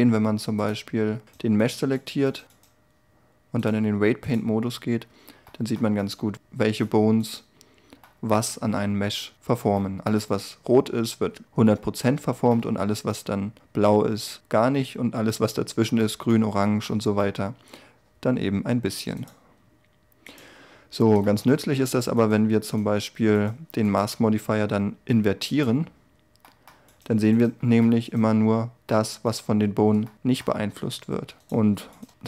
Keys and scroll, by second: 30.8 r.